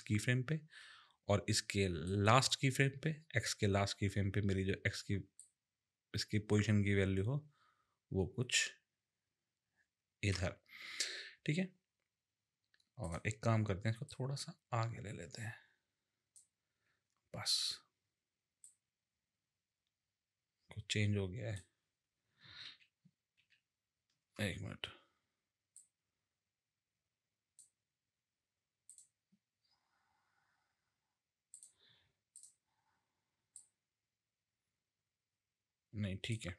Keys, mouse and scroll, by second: 2.0 click, 5.4 click, 13.0 click, 14.1 click, 18.6 click, 22.7 ctrl+z, 23.4 ctrl+z, 25.7 click, 28.9 click, 31.5 click, 32.3 click, 33.5 click.